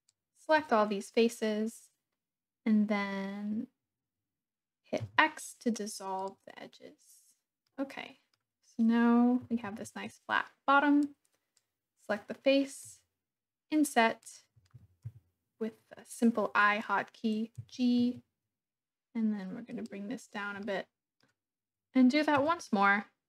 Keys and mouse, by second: 5.0 x, 7.6 click, 7.8 middle click, 9.6 alt+z, 11.0-12.1 drag, 12.9 i, 14.3 click, 15.1 KP_1, 17.6 g, 18.0 z, 19.7 click, 20.6 click.